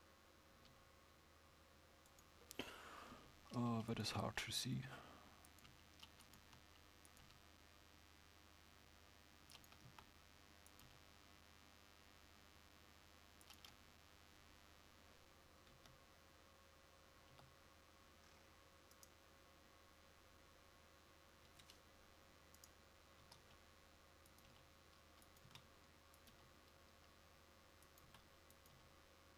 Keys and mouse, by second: 3.2 g, 4.1 s, 5.7 g, 9.9 s, 17.4 z, 23.3 s, 24.6 g, 25.5 s.